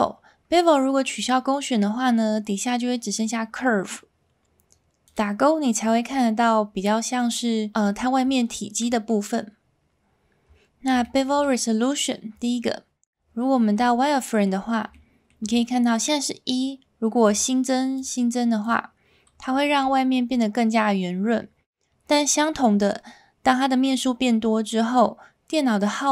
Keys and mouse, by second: 1.2 click, 5.1 click, 11.0 shift+middle drag, 13.2 z, 14.2 middle drag, 14.9-15.3 shift+middle drag, 17.2 click, 17.9 click, 18.6 click, 19.7 z.